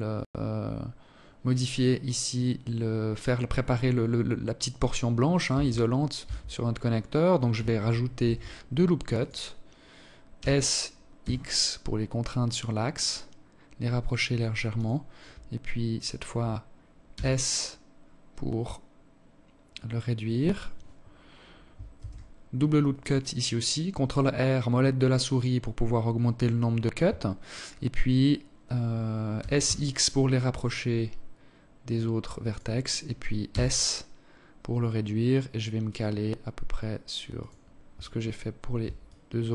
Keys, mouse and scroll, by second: 4.2 Tab, 4.9 Tab, 6.9 ctrl+r, 9.1 s, 15.7 s, 20.7 ctrl+r, 24.2-25.9 scroll up 1, 25.9 scroll up 1, 28.1 s, 32.2 s, 37.8 alt+shift+click.